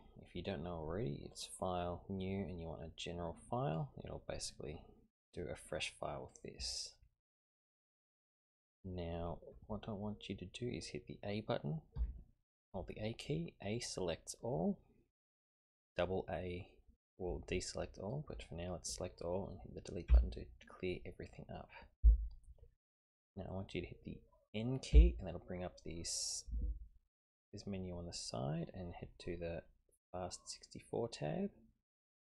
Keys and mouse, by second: 1.3-4.0 drag, 12.0 a, 20.1 Delete, 24.9 n.